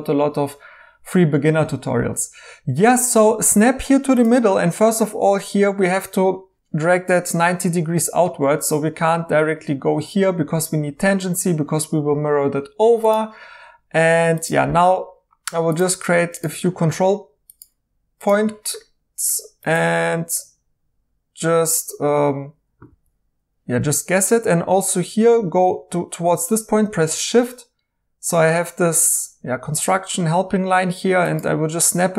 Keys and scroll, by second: 22.9 ctrl+z.